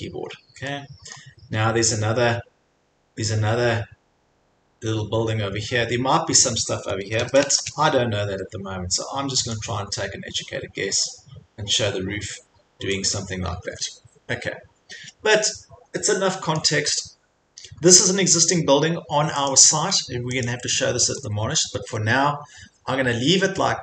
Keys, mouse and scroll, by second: 0.2 click, 0.2 c, 1.2 scroll up 1, 7.0-8.0 typing, 9.5 click, 13.2 click, 13.5 scroll, 13.7 Escape, 14.1-15.0 scroll, 15.4-16.1 scroll, 16.6 click, 17.7-18.3 scroll, 19.5 click, 20.4 click, 21.6 Escape, 21.8 scroll, 21.9 Escape.